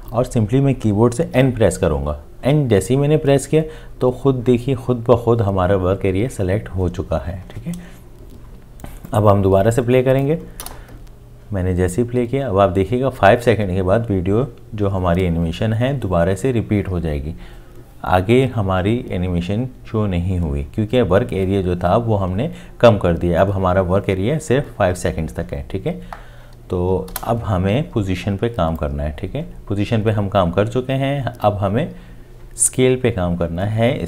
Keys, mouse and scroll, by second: 1.3 n, 10.6 space, 27.1 space.